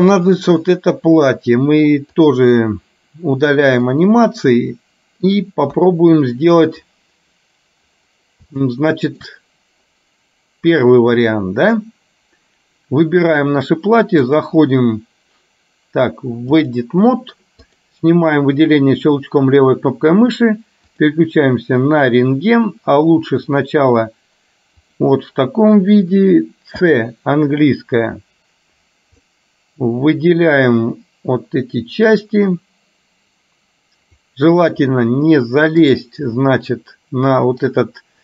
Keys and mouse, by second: 3.9-5.3 middle drag, 5.8 KP_1, 8.8 shift+middle click, 14.4-16.9 drag, 17.7 click.